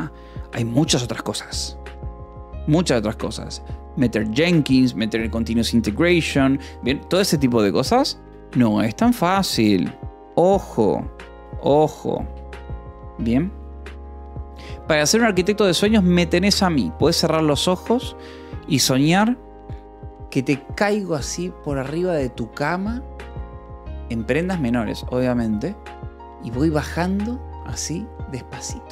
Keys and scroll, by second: 12.5 j, 13.0 j.